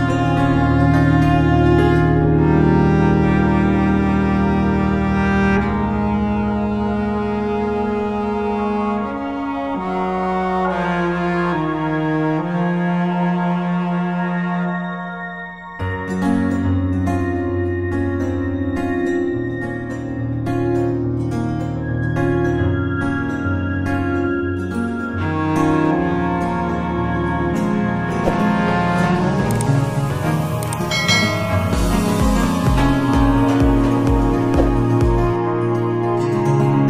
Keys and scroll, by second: 1.7 ctrl+t, 3.7 Return, 4.2-5.9 typing, 7.0 Return, 10.9 space, 13.7 ctrl+t, 16.1 Return, 17.8-19.3 typing, 22.6 space, 24.0 F9, 24.9 ctrl+t, 30.3 space, 32.2 space, 33.5 Return.